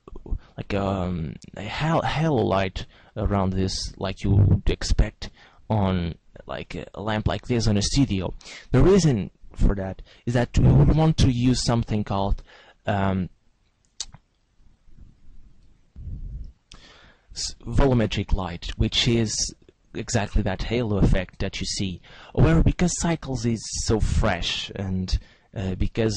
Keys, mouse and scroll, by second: 10.9 shift+a, 24.0 click.